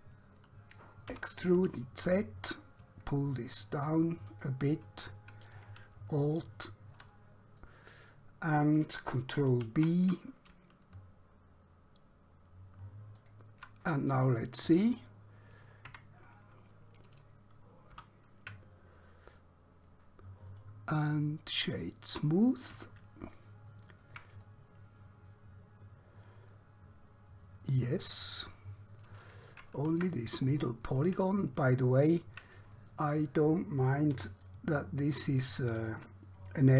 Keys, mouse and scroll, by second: 1.3 e, 1.6 z, 4.3 click, 6.2 alt+click, 7.7 middle click, 9.5 ctrl+b, 13.2 shift+click, 14.2 click, 15.0 middle click, 16.0 Tab, 18.0 ctrl+2, 19.5 middle click, 20.6 right click, 21.6 click, 23.4 shift+middle click, 24.5 middle click, 30.1 Tab, 30.7-31.3 scroll up 1, 31.5 shift+middle click, 34.1 1, 34.5 click.